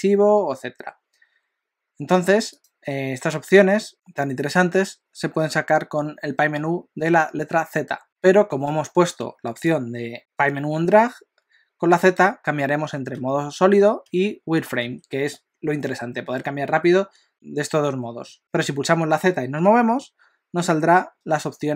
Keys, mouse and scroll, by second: 2.7 click, 8.0 z, 9.2 F4, 13.2 z, 14.1 z, 14.8 z, 17.3 z, 18.0 z, 19.5 z.